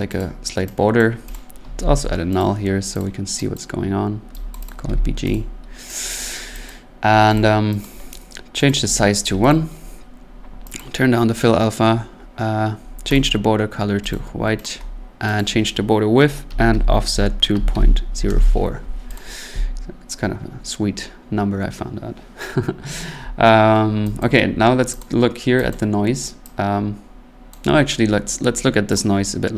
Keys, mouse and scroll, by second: 0.2 click, 1.0 click, 1.3 click, 1.5-2.3 typing, 2.4 click, 3.0 click, 3.5 click, 4.5 click, 4.7 click, 4.8-5.2 typing, 5.3 click, 6.1 click, 6.7 click, 7.1 middle click, 7.4 click, 7.8 click, 8.7 click, 8.8 1, 9.2 click, 9.3 1, 9.5 click, 10.8 click, 13.1 click, 14.1 click, 14.3 typing, 14.6 click, 15.4 click, 16.2-18.3 typing, 19.2 click, 19.8 middle click, 20.5 middle click, 21.3 scroll, 24.2 click, 24.4 scroll, 25.0 click, 25.7 click, 27.5 click, 27.7 middle click, 27.7 middle click, 28.9 click.